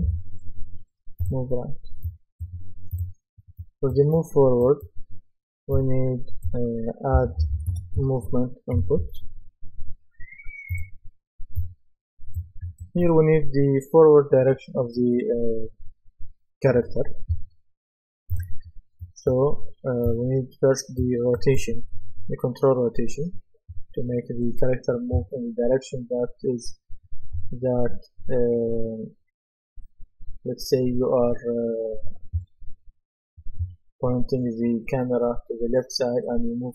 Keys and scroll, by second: 7.0-8.8 typing.